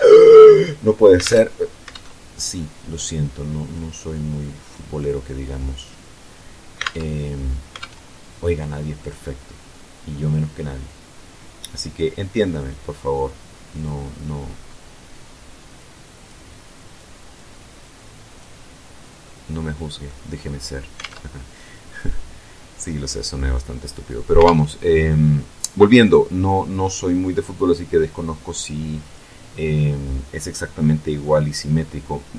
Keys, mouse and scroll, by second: 0.9 alt+Tab, 1.6 alt+Tab, 2.5-3.6 drag, 3.8 click, 4.7 click, 6.5 alt+Tab, 7.5 alt+Tab, 8.7 click, 13.4 click, 14.8-16.1 drag, 16.6 click, 17.5 click, 18.6-18.9 scroll down 1, 18.9 middle click, 19.9 scroll up 1, 20.6 alt+Tab, 24.1 alt+Tab, 27.2-29.0 drag, 29.9 scroll down 2, 31.2 scroll up 2, 32.0-32.3 scroll down 2.